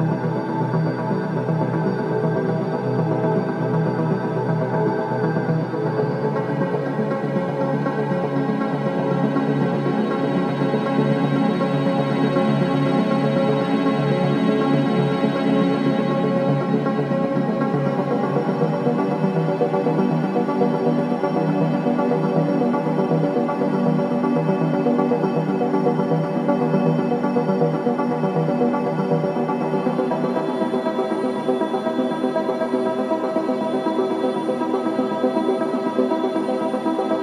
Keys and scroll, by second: 11.9 4, 21.6 F9, 24.1 2, 27.7 ctrl+z, 31.0 4, 31.7 2, 32.6 2.